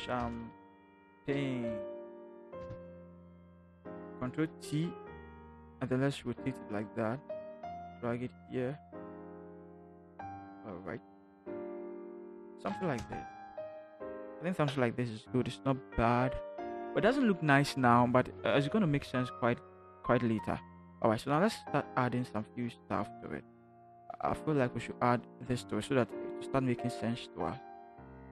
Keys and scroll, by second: 0.0-3.1 typing, 4.2 ctrl+t, 13.0 Return.